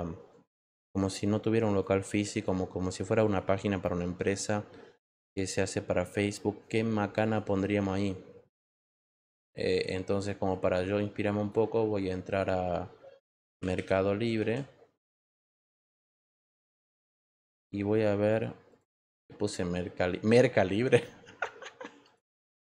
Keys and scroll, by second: 13.2-17.3 typing.